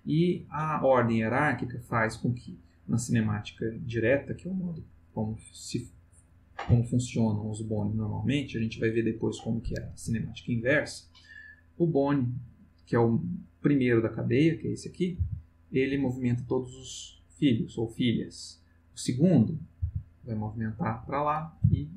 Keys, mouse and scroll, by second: 15.2 r, 15.9 Escape, 18.9 click, 19.8 r, 21.0 Escape, 21.4 click, 21.6 r.